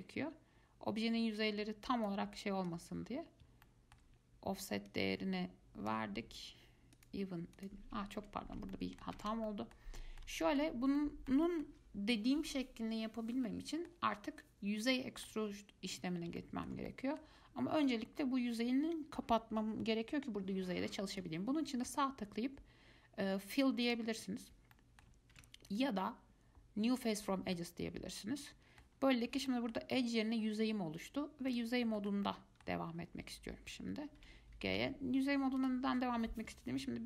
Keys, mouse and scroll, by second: 3.6 shift+scroll up 1, 3.8-5.1 shift+middle drag, 5.1-7.2 drag, 7.8 click, 8.3 ctrl+z, 8.9 middle click, 9.4 ctrl+z, 9.7-10.9 middle drag, 10.9 scroll down 1, 11.2-15.9 middle drag, 15.9-16.6 scroll up 1, 16.6-20.1 shift+middle drag, 21.3-24.9 right drag, 24.9-25.5 middle drag, 25.5 ctrl+z, 25.9-27.8 right drag, 27.8-29.1 middle drag, 29.1-29.6 scroll down 1, 29.7-31.7 shift+middle drag, 31.7 click, 32.2-34.4 shift+middle drag, 34.4 g.